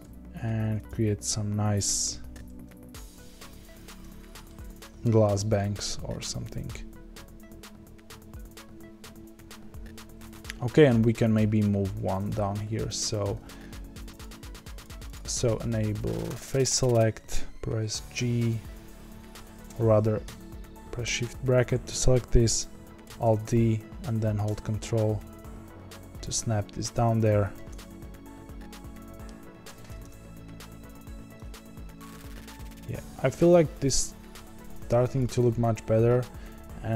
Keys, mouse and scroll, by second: 4.1-4.4 scroll down 2, 4.4-13.0 shift+middle drag, 13.0 click, 14.0 click, 18.1 g, 21.0 shift+], 23.0 alt+d, 27.7-29.2 middle drag, 29.2-30.0 scroll down 4, 30.0 KP_0, 31.1-32.1 scroll down 2, 32.1 click, 32.6 s.